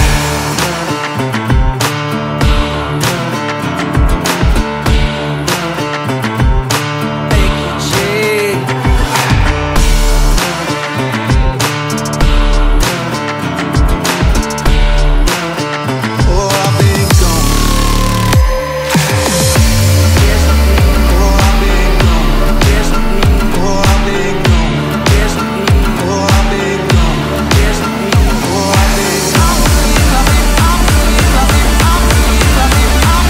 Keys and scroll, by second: 1.7 super+z, 2.0 super+t, 2.5 Return, 2.7 z, 2.8 space, 3.9 super+d, 4.5 Escape, 4.7 Return, 4.9 super+t, 5.2 Escape, 5.3 Return, 6.6 Return, 6.7 space, 7.5 Return, 8.5 super+z, 8.6 super+j, 10.9 Down, 11.0 Left, 11.3 Down, 11.4 Left, 11.6 Down, 11.7 Up, 12.5 Left, 12.5 Up, 12.9 Down, 13.0 BackSpace, 14.6-17.4 typing, 15.6 Down, 18.1 Down, 18.6 Down, 18.9 Up, 19.2 Down, 19.6 Up, 20.1-21.5 typing, 21.6 Down, 22.2 Down, 22.8 Up, 22.9 Down, 23.3 Up, 23.4-30.3 typing, 24.7 Up, 24.8 Down, 27.0 Up, 27.1 Down, 27.7 Down, 27.9 Up, 28.0 super+t, 30.4 Down, 31.2 Up, 31.5 t, 31.6 Down.